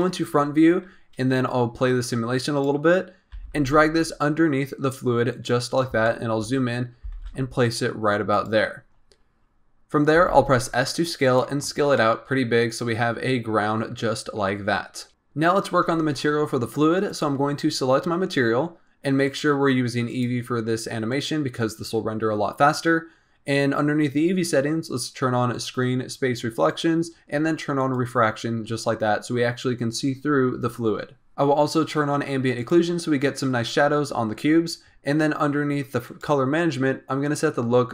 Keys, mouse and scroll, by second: 1.6-2.9 drag, 2.9-3.3 scroll up 1, 3.3 g, 5.7 scroll up 1, 5.9 shift+scroll down 1, 6.0 shift+middle click, 6.4-6.8 scroll up 10, 7.0 g, 8.6-10.1 scroll down 19, 10.1 s, 11.9-14.3 middle drag, 14.3-15.1 scroll up 5, 15.1-15.4 middle drag, 17.0 click, 19.2 click, 20.0-23.1 drag, 25.5-27.9 drag, 31.3 click, 32.5 click, 36.0 click, 36.4-37.2 scroll down 3, 37.2-37.9 drag.